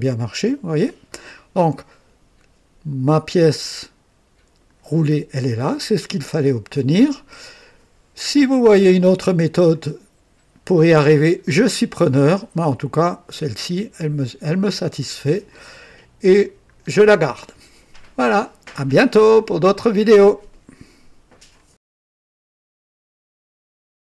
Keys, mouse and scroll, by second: 6.9-8.7 drag, 8.9-13.3 drag, 13.5-15.7 drag, 16.1-20.3 drag, 20.6 scroll up 1.